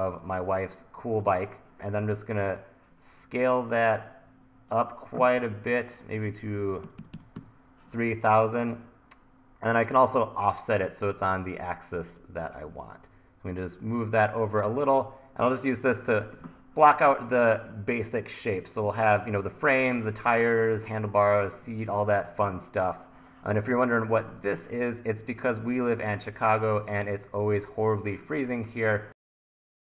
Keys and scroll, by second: 6.6 KP_3, 6.9 KP_0, 7.4 KP_Enter, 16.5 1, 18.9 1, 21.7 1, 22.4 1, 26.7 1.